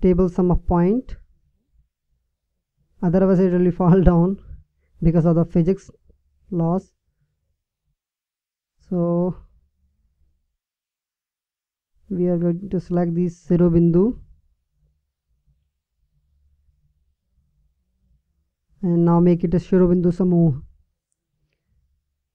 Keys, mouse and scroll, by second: 3.8 Tab, 11.7 a, 13.8 b, 20.2-21.9 drag.